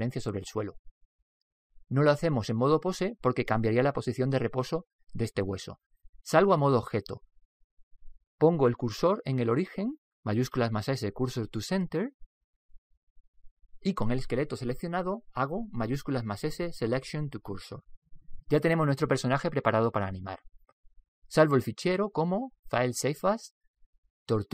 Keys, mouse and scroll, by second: 7.1 click, 9.6 shift+s, 11.1 shift+s, 15.8 shift+s, 17.0 shift+s, 20.8-22.6 middle drag, 23.5 click.